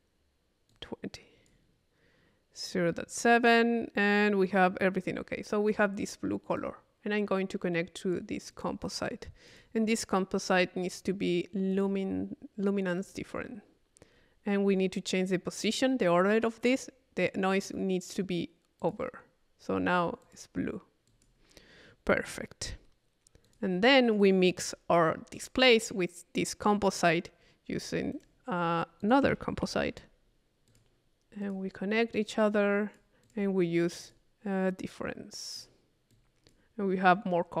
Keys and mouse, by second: 0.7-1.9 drag, 5.6 middle click, 6.6-9.0 drag, 10.9 click, 11.7 click, 13.0 click, 14.1 click, 18.8 click, 20.2 click, 21.1 click, 21.7 middle click, 24.2 click, 25.4 click, 26.6 click, 28.1 right click, 29.0 click, 29.2 c, 30.7 click, 31.5 click, 32.3-33.7 drag, 34.0 click, 35.6-37.0 drag, 37.1-37.6 drag.